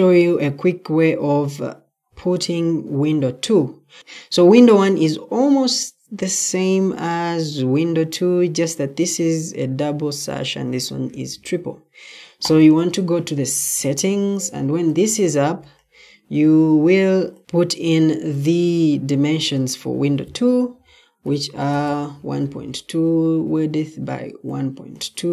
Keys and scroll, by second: 20.9-22.2 typing, 25.2-25.3 typing.